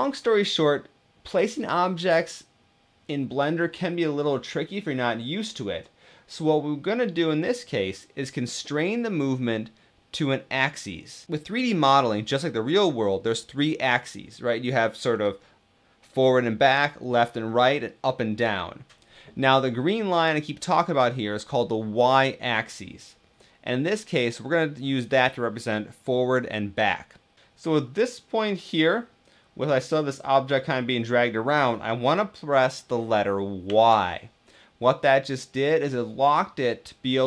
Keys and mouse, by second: 27.4 shift+d, 33.4 y.